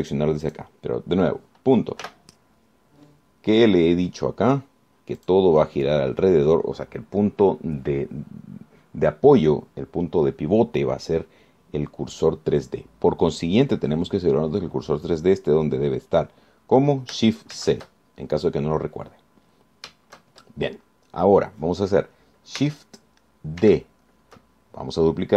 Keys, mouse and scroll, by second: 1.2 click, 1.6 click, 3.2 ., 6.4 click, 18.8 shift+c, 19.7-20.2 scroll up 4, 20.2 scroll down 2, 24.8 shift+d.